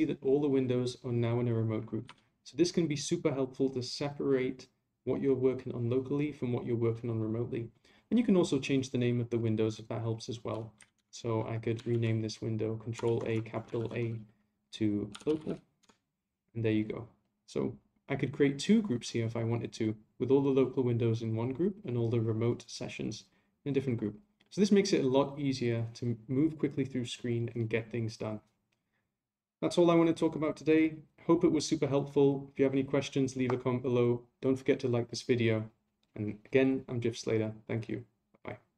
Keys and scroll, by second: 11.9 a, 13.8 ctrl+u.